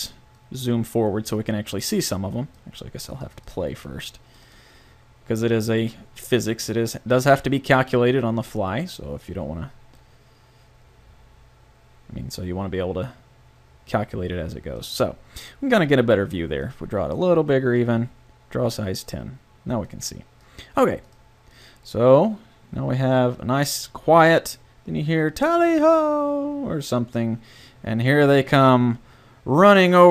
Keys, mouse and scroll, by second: 14.8-15.8 drag.